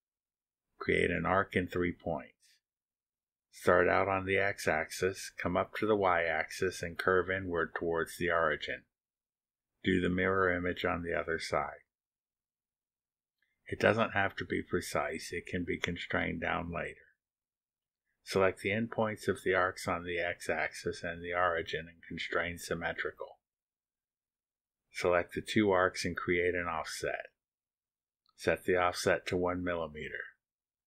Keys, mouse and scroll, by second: 0.6-1.1 scroll down 2, 2.0 click, 2.8 click, 5.1 click, 8.0 click, 9.4 click, 11.3 click, 13.9 click, 17.3 click, 18.8 click, 19.9 click, 21.2 ctrl+click, 22.1 ctrl+click, 23.8 click, 27.0 click, 27.6 ctrl+click, 29.6 click.